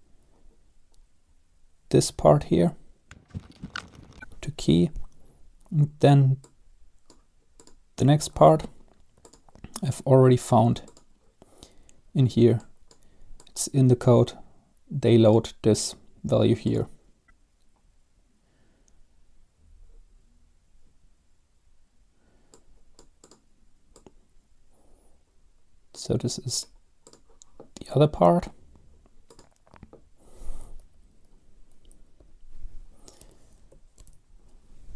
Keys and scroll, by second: 3.4-4.5 typing, 31.1 Up, 32.3 Left, 33.3 space, 34.1 ctrl+v.